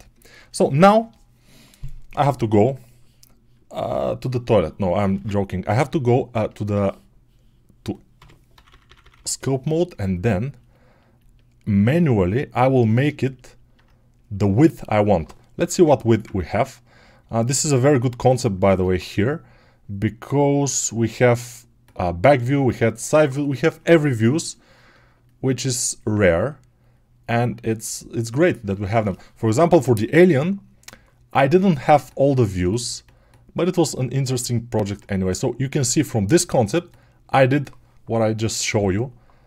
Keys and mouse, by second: 8.4-9.0 typing, 25.1-39.4 alt+drag.